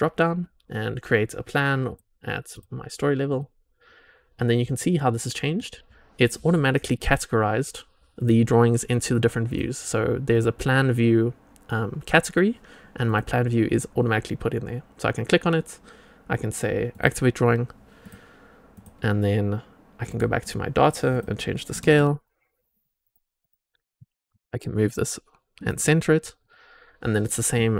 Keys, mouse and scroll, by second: 1.8-2.5 drag, 3.2 click, 4.6 click, 6.4-7.1 drag, 8.1-9.5 drag, 10.2 click, 13.0 click, 16.8 click, 18.0 click, 18.6 click, 20.0 click, 21.1 click, 23.0 click, 23.3 click, 23.9 g, 26.3 click.